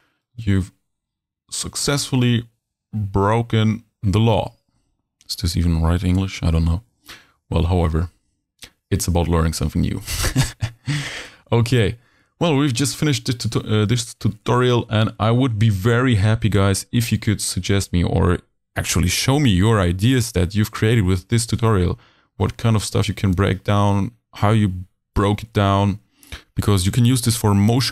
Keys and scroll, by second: 25.4 super+s.